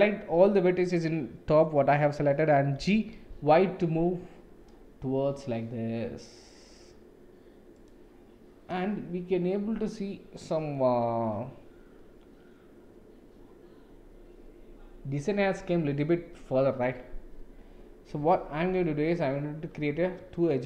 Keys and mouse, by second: 2.7 g, 18.6 ctrl+r.